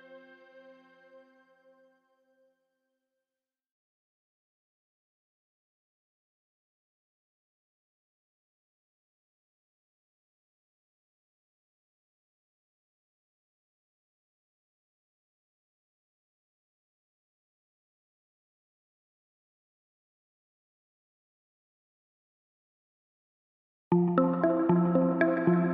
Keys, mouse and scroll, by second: 0.6 click, 2.3 click, 8.3 click, 10.1 click, 13.8 click, 24.2 click.